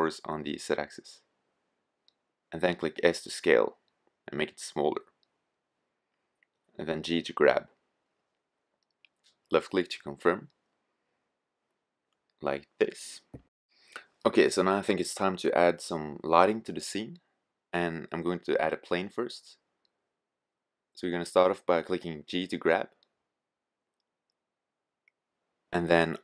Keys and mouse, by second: 0.7-2.4 drag, 2.0 s, 5.2-6.5 drag, 6.5 g, 11.6-13.1 middle drag, 13.1 drag, 18.9 click, 19.9-20.4 middle drag, 23.9 g.